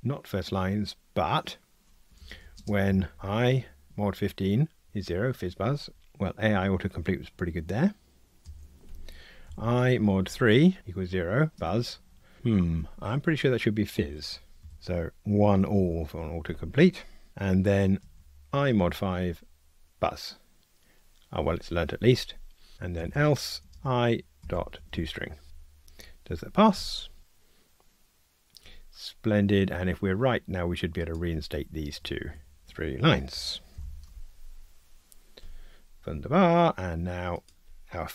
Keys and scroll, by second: 3.9 Tab, 11.6 Tab, 14.7 alt+shift+Left, 14.7 alt+shift+Right, 18.8 Tab, 25.5 Return, 33.7 super+/, 34.1 ctrl+r.